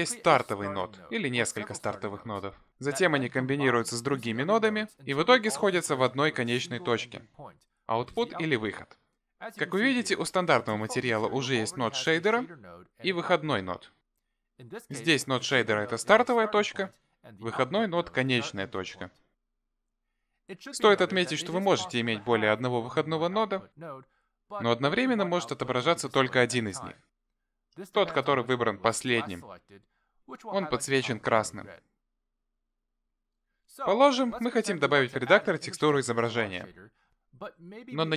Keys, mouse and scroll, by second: 2.4 click, 3.2 click, 7.9 click, 13.3 click, 14.6 click, 23.2 shift+d, 27.4 click, 28.7 click, 30.8 click, 33.1 click, 34.7 Delete.